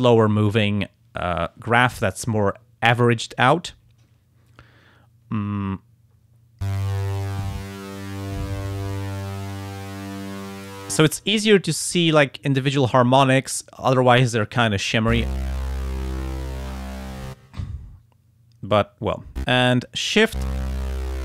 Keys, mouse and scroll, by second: 8.2-10.7 drag, 20.8-21.2 drag.